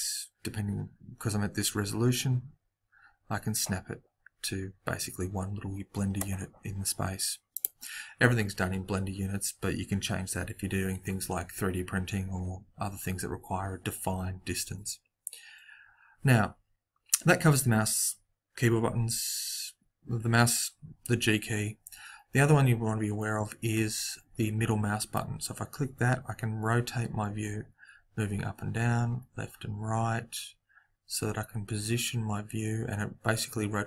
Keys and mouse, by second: 25.1-27.5 middle drag.